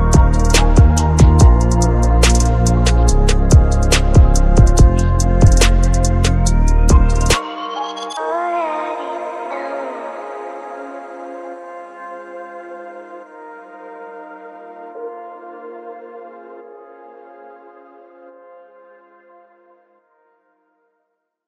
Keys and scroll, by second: 5.6 ctrl+-, 13.0 ctrl+=.